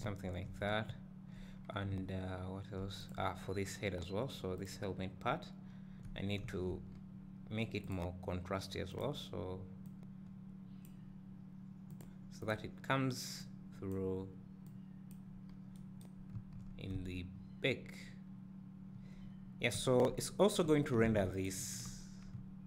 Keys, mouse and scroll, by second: 0.9 `, 1.6 scroll down 1, 3.0 `, 3.2 click, 4.6 click, 7.9 click, 12.0-12.5 drag, 14.7-15.5 drag, 15.5 scroll down 2, 17.0-21.6 drag, 17.0 `, 22.4 `.